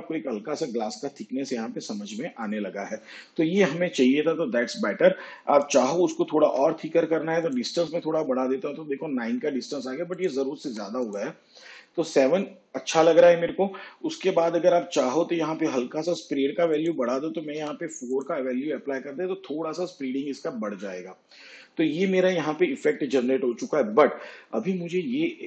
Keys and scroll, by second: 6.5 9, 10.7 7, 17.6 4.